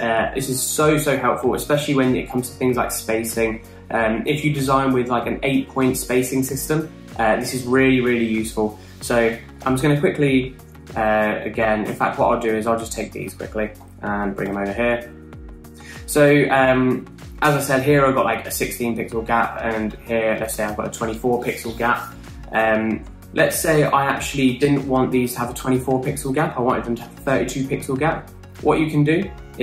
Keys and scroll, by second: 9.9 r, 12.1 BackSpace, 14.1 super+c, 14.7 super+v, 20.2 alt+Down.